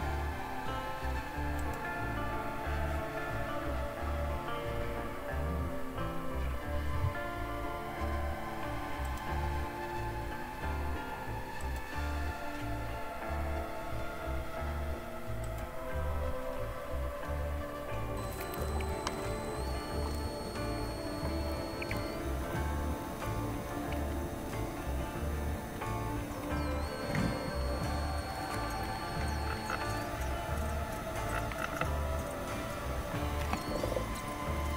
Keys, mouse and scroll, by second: 1.6 click, 9.1 click, 11.6 click, 15.4 click, 21.4 super+f, 22.9 super+w, 23.2 super+f, 33.3 click.